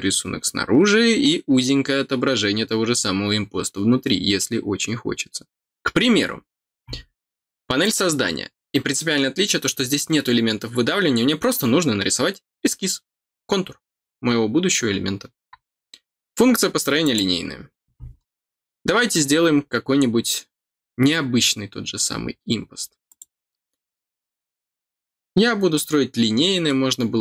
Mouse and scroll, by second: 7.8 click, 17.0 click, 18.1 scroll up 1, 19.2 scroll down 1, 20.0 scroll down 1, 21.1-22.5 scroll up 1, 23.0 click.